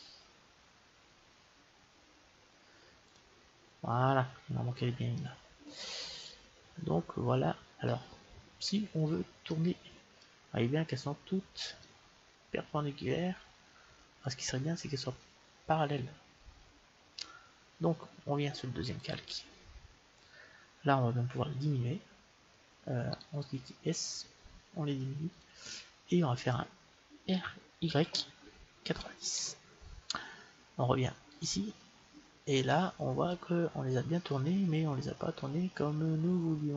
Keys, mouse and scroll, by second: 3.1-4.8 drag, 5.1-7.2 middle drag, 9.4-11.4 middle drag, 11.9-13.7 middle drag, 16.2-19.0 middle drag, 19.0-20.8 drag, 20.1 middle click, 21.9 s, 23.0-25.0 right drag, 23.6 s, 25.6-27.7 middle drag, 27.2 r, 31.2-33.2 drag, 32.5-36.2 middle drag.